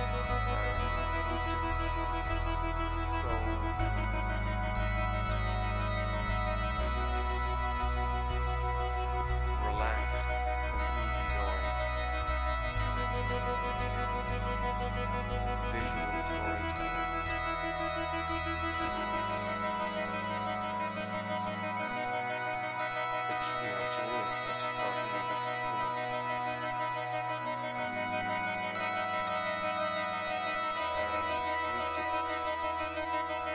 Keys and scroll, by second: 0.2 super+-, 0.7 super+-, 2.2 super+a, 4.6 super+v, 25.3 super+=.